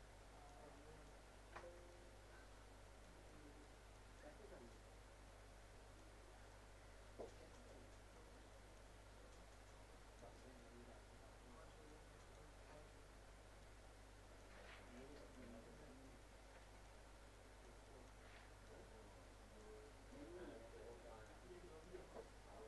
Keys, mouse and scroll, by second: 3.3 middle click, 4.0 click, 6.2 scroll, 6.5 middle click, 7.3 scroll down 1, 8.2 middle click, 8.5 click, 10.4 middle click, 10.7 scroll up 1, 11.9 click, 12.5 scroll up 1, 13.6 click, 14.6 scroll up 1, 14.9 click, 15.8 scroll down 1, 16.0 middle click, 16.3 scroll up 1, 16.6 click, 19.9 scroll up 1, 20.5-20.9 scroll down 1, 20.9 click.